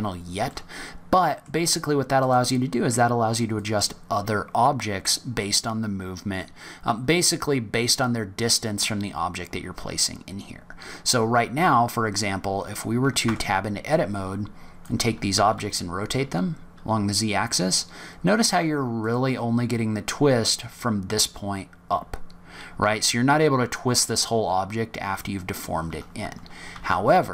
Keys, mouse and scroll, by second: 0.5 middle click, 2.2 click, 3.5 click, 13.2 Tab, 13.8 click, 15.3 r, 26.7 ctrl+z.